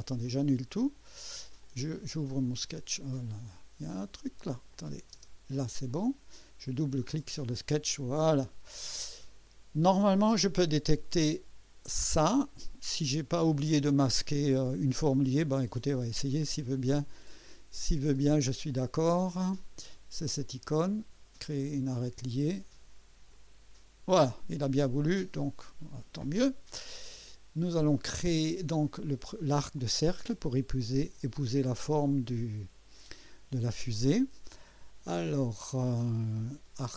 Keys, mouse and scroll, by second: 0.2 click, 1.6 click, 3.4 click, 4.7 click, 5.2 space, 5.9 click, 6.9 click, 8.0 scroll up 1, 8.9-9.6 right drag, 21.6 click, 23.3 click, 25.4 right click, 27.5 scroll down 2, 28.0 right click, 29.4 right click.